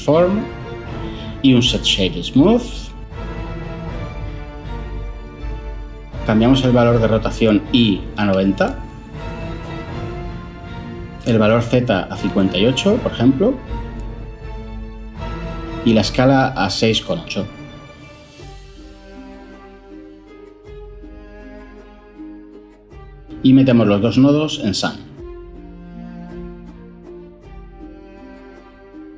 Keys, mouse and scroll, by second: 1.2 ctrl+shift+a, 2.1 typing, 2.6 Down, 2.7 Return, 7.4-7.8 typing, 14.2 BackSpace, 14.5 5, 14.8 Return, 16.7-17.8 typing.